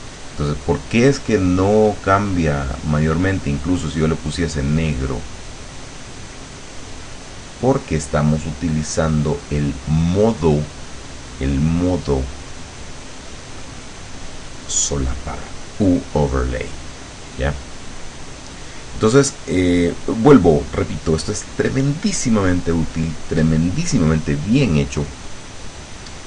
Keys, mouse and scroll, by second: 2.0 click, 2.9 click, 4.4-10.5 drag, 11.8 click.